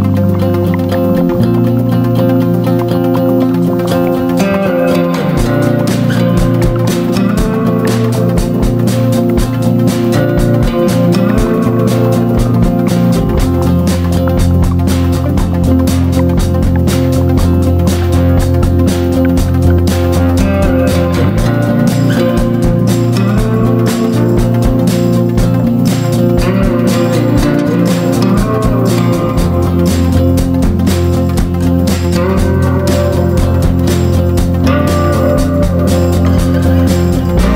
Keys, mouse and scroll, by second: 3.3 shift+click, 4.3-8.5 drag, 8.5 right click, 9.2 click, 9.8 ctrl+z, 10.1 click, 11.6 shift+click, 12.5 click, 16.3 Delete, 17.3-24.6 drag, 17.7 Delete, 25.4-37.5 ctrl+drag.